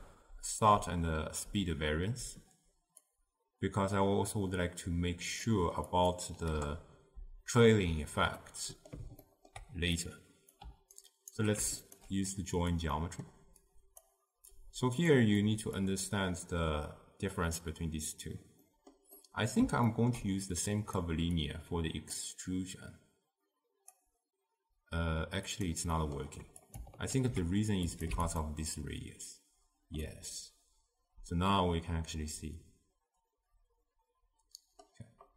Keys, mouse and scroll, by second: 11.4-11.9 alt+right drag, 11.9 alt+shift+click, 24.0-27.2 drag, 27.2 ctrl+h, 28.4 click, 30.2-33.2 middle drag.